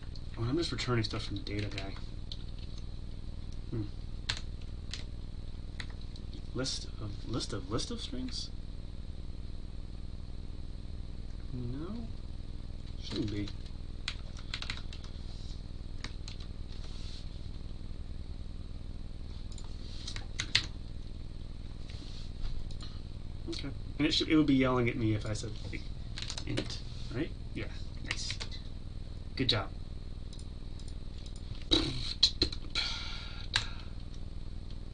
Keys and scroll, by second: 5.8 Tab, 14.9 Delete, 16.3 ctrl+s, 20.5 ctrl+alt+l, 26.5 Escape, 28.4 ctrl+z.